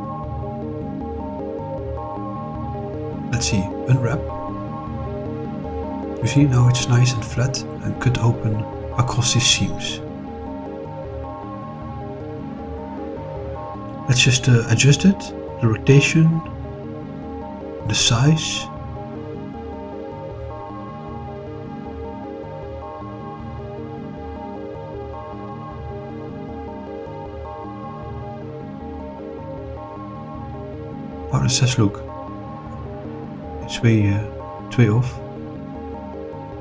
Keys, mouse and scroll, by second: 0.0 shift+click, 0.4 middle click, 2.1 shift+click, 2.8 shift+click, 5.0 click, 6.1 click, 12.6 click, 13.4 click, 15.7 r, 17.2 9, 17.5 0, 18.9 click, 24.1 s, 26.0 3, 26.5 0, 26.7 0, 29.3 Return, 32.2 click, 33.0-33.5 middle drag, 33.8-34.8 scroll up 1, 34.8-36.1 middle drag.